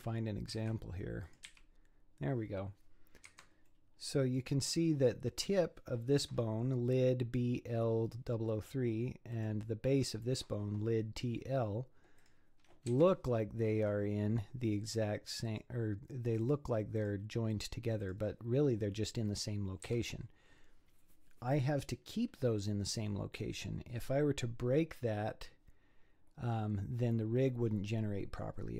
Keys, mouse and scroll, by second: 0.0 g, 1.2 click, 1.5 g, 3.7-4.8 middle drag, 4.8-5.2 scroll up 8, 9.3 click, 12.2 click, 12.9 z, 13.7-14.9 scroll up 8, 14.9 click, 15.5 click, 16.4 click, 17.0 click, 17.5 click, 18.0 click, 18.6-19.9 scroll down 7, 19.9 z, 23.9-24.6 scroll down 3, 24.6 scroll up 5, 27.0 scroll down 5, 27.7-28.7 scroll down 6.